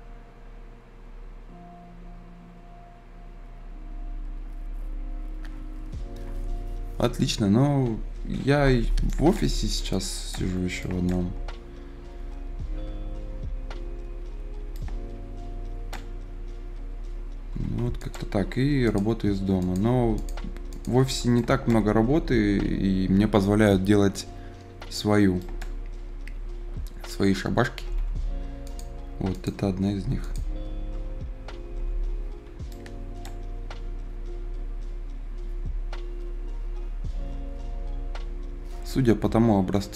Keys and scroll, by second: 8.4 Escape, 17.5 Escape, 18.4 Escape, 27.7 Escape, 31.4 Escape.